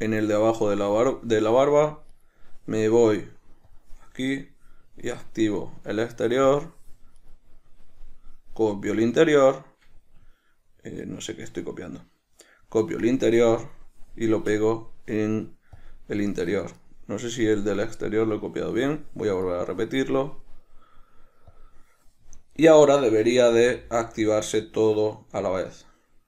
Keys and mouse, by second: 0.1-2.5 right drag, 3.3-4.7 right drag, 5.6-7.5 right drag, 8.6-14.0 right drag, 14.8-17.1 right drag, 18.5-19.8 right drag, 20.7-22.9 right drag, 23.9 g.